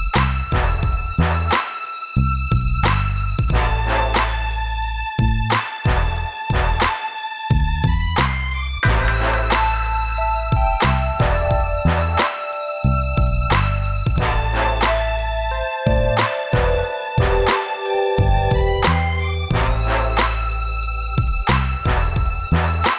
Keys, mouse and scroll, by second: 0.3 middle click, 3.6 m, 4.9 click, 8.9 click, 10.0 click, 10.3 click, 10.5 click, 11.4 click, 11.5 click, 11.7 click, 12.1 click, 12.2 double click, 15.5 alt+Return, 15.8 alt+Return, 17.4 click, 18.2 middle click, 22.6 middle click.